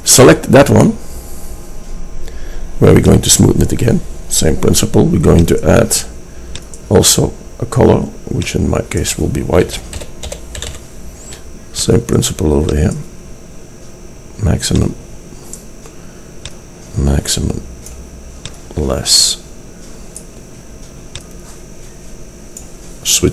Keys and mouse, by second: 12.8-14.6 drag, 16.6-18.5 drag, 18.7-20.5 drag, 21.3-23.3 drag.